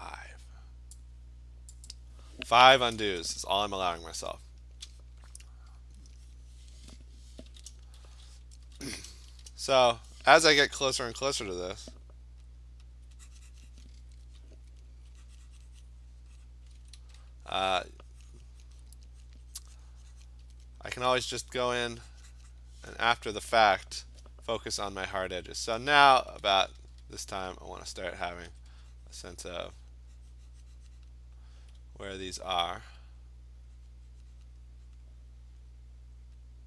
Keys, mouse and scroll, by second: 0.9 click, 1.9 click, 4.0-4.8 scroll, 4.6 click, 7.5-9.5 typing, 11.1 ], 11.3 ], 11.5 ], 12.6 alt+click, 12.9 alt+click, 13.8 click, 14.4-15.1 ], 16.0 click, 16.5 click, 16.7 [, 16.9 [, 17.2 click, 18.4 click, 18.6 click, 19.3 click, 20.2 click, 20.4-21.1 [, 21.3 [, 22.5 click, 25.2 alt+click, 26.4-27.3 typing, 28.4 click, 28.5 ], 28.7 ], 29.5 click, 29.9 click, 30.2 alt+click, 31.1 click, 34.5 click, 35.0 click, 35.6 click, 36.2 click.